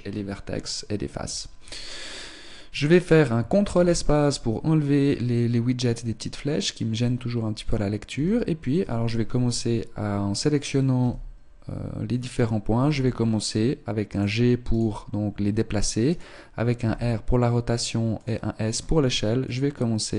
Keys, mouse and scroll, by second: 3.7 ctrl+space, 8.1 r, 9.5 right click, 10.3 right click, 11.1 r, 12.9 g, 14.7 right click, 16.1 right click, 16.8 r, 18.7 s, 19.5 click, 19.5 right click.